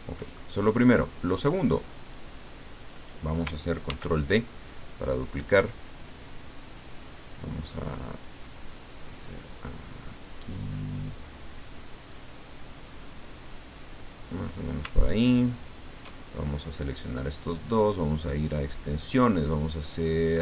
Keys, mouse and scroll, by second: 0.4 ctrl+middle click, 2.0 click, 2.8 click, 3.9 ctrl+d, 4.7-14.8 ctrl+drag, 15.5 shift+click, 17.8 click.